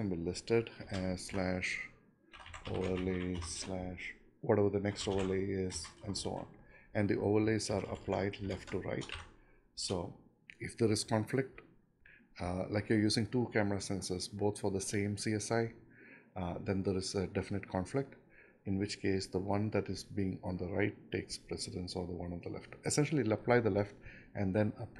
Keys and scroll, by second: 1.9-7.1 typing, 8.8 ctrl+shift+Left, 10.2 Delete, 10.9 BackSpace.